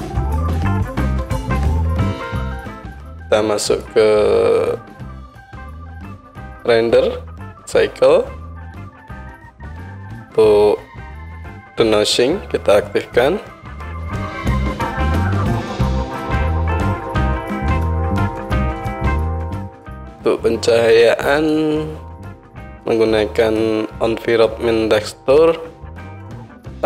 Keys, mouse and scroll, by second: 2.6-3.7 drag, 3.8-5.4 drag, 5.6-10.7 middle drag, 11.9-14.8 right drag, 14.8-18.9 drag, 19.1-20.0 right drag, 20.0 middle click, 20.2-21.5 right drag, 21.5-26.8 middle drag, 26.2 click, 26.2 right click.